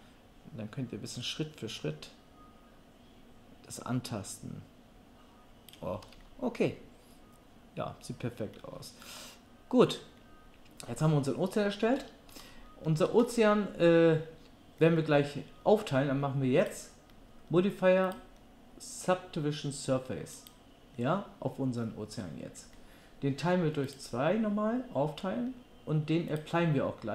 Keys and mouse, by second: 16.8-18.2 middle drag, 18.2-27.1 drag.